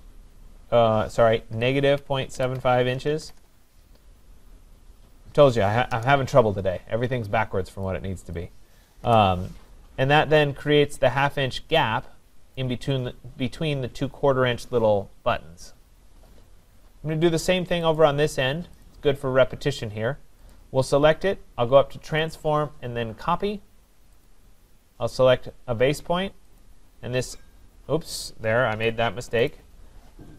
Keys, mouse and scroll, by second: 1.3-3.6 typing, 5.9 Return, 7.9 click, 8.4 click, 9.1 Delete, 9.9-10.5 scroll down 4, 10.7 middle click, 12.6 right click, 16.2-17.6 scroll, 18.0 click, 18.8 click, 20.5 click, 22.2 click, 24.3 click, 26.6 click, 28.8 Escape, 29.5 right click.